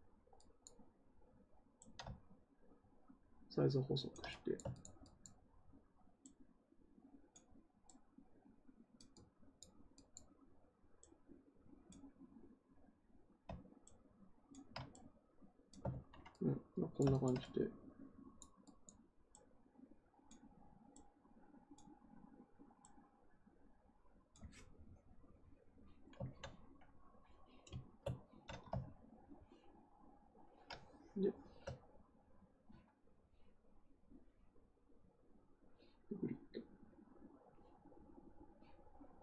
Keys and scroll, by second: 15.8 ctrl+z.